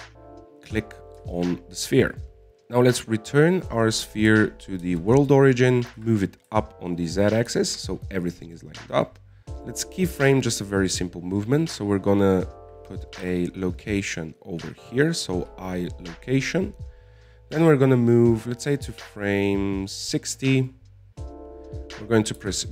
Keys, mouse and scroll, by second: 0.9 click, 2.6-3.7 drag, 3.7 right click, 5.9 shift+s, 7.0 g, 8.9-10.9 shift+middle drag, 10.9 click, 14.6 i, 19.3-22.4 drag.